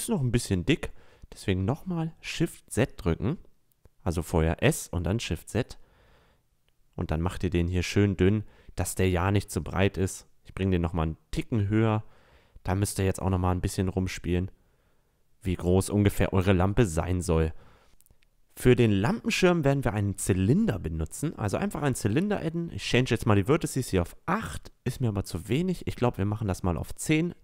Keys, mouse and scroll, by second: 7.7 s, 10.3-12.0 drag, 12.7 click, 16.4 a, 16.7-17.3 middle drag, 20.5 click, 21.0-23.9 drag, 25.6-27.4 drag.